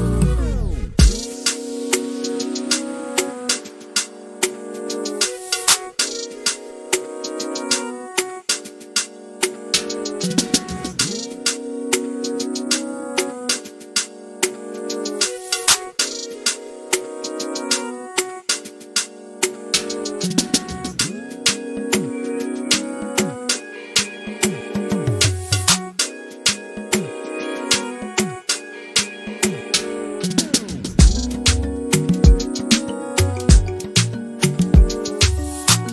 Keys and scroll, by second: 26.0-27.3 typing, 28.9-30.2 typing, 33.9-34.7 typing.